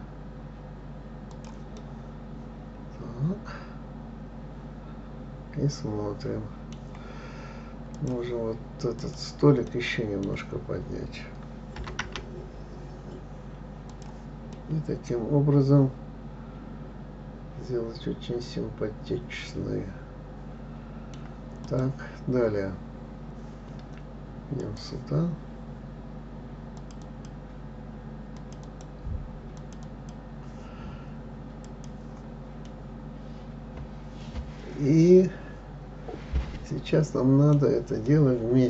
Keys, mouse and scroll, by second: 2.2-5.2 middle drag, 8.3 click, 9.4 click, 10.1-12.2 middle drag, 12.2 g, 15.0-18.0 middle drag, 22.0 click, 25.0-27.3 drag, 27.4 click, 28.7 click, 29.0 click, 30.0 click, 30.3 click, 32.0 click, 33.1-36.1 middle drag, 38.5-38.6 middle drag.